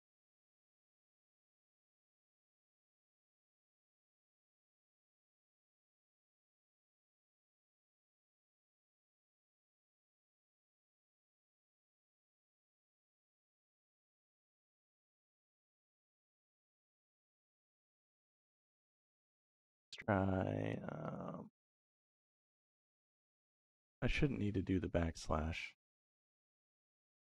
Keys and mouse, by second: 7.9 middle click, 11.1 middle click, 18.5 middle click, 19.3 middle click, 20.4-25.1 drag, 25.9 middle click, 27.0-27.3 drag.